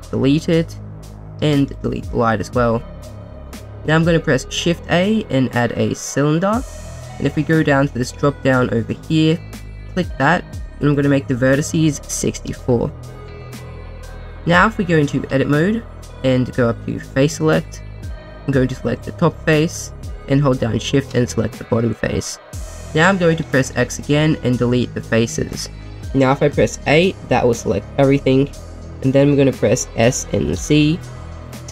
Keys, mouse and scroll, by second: 0.9 click, 1.4 x, 2.3-3.6 drag, 3.8 shift+a, 8.4 click, 10.8-12.4 drag, 15.3 Tab, 16.4 Tab, 18.1 Tab, 18.1 click, 19.0 click, 19.5 middle click, 20.8 shift+click, 21.3 middle click, 22.2-22.6 scroll up 1, 23.7 x, 26.8 a, 29.9 s, 30.5 z.